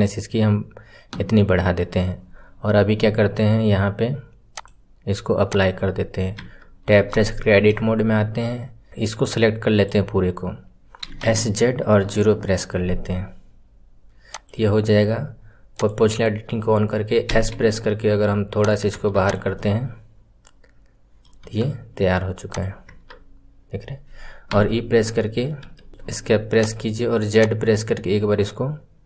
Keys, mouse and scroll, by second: 1.1 KP_1, 1.3 scroll down 2, 2.1-4.5 scroll up 16, 4.5-6.3 drag, 6.3 Tab, 6.8 scroll up 3, 7.2-8.8 shift+middle drag, 8.8 click, 10.9 s, 15.7 click, 19.1 click, 19.5-21.3 middle drag, 21.3 KP_1, 21.8-22.4 scroll up 1, 22.4 click, 26.5 click, 27.3 click.